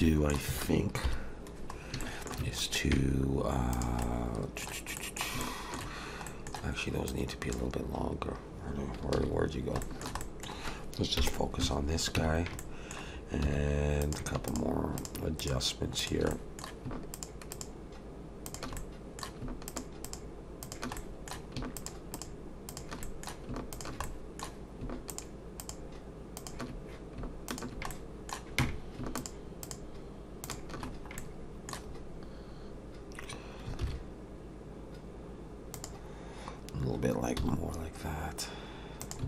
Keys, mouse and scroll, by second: 0.0 middle click, 1.0 KP_7, 1.8 scroll up 1, 2.0 shift+middle click, 3.7 click, 4.0 middle click, 5.0 middle click, 5.2 shift+middle click, 5.4 shift+middle click, 6.3 middle click, 7.1 click, 9.2 ctrl+z, 9.4-9.7 scroll down 2, 9.8 shift+middle click, 10.2 middle click, 11.2 /, 12.2 Tab, 12.6 middle click, 13.4 3, 14.0 click, 14.5 shift+click, 15.0 shift+click, 16.0 click, 16.3 middle click, 17.1 shift+click, 17.5 shift+click, 18.8 middle click, 19.7 shift+click, 20.0 shift+click, 21.0 middle click, 21.8 shift+click, 22.1 shift+click, 23.0 middle click, 23.7 shift+click, 24.0 middle click, 25.1 shift+click, 25.6 shift+click, 27.5 shift+click, 27.9 middle click, 29.2 shift+click, 29.6 shift+click, 30.9-33.5 scroll down 2, 31.2 middle click, 33.8 alt+s, 37.4 s.